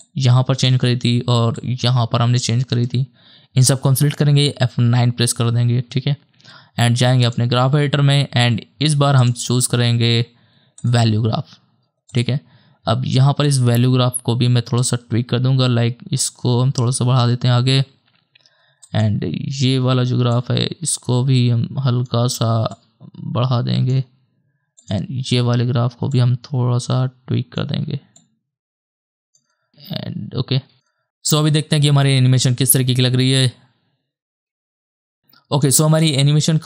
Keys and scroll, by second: 4.8 F9, 31.4 KP_0, 35.7 KP_0, 36.0 KP_0.